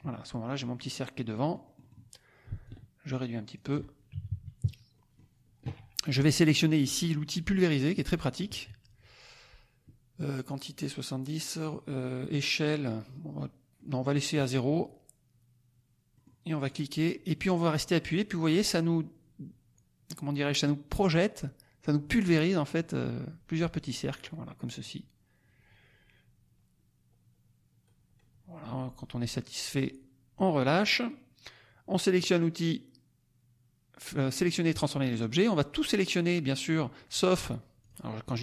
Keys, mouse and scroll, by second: 1.2 middle click, 1.4 click, 2.6-3.7 ctrl+drag, 4.1 ctrl+KP_Subtract, 4.9 ctrl+middle click, 5.0 click, 5.1 right click, 7.8 click, 13.7 click, 16.2 middle click, 16.6-20.3 drag, 20.3 middle click, 20.5-27.8 drag, 27.8-28.4 scroll down 1, 34.7 click, 35.5-36.8 drag, 37.8 click, 38.2-38.4 drag.